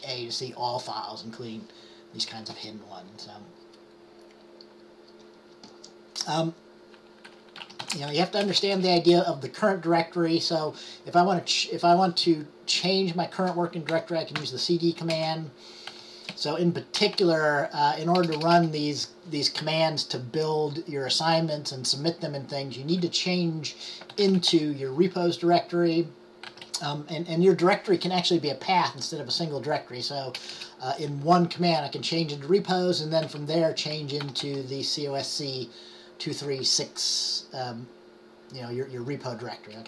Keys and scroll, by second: 7.5-8.4 typing, 14.0-14.5 typing, 16.0-19.0 typing, 24.0-25.1 typing, 26.3-27.1 typing, 30.5 typing, 33.4-35.0 typing, 36.9-37.6 typing.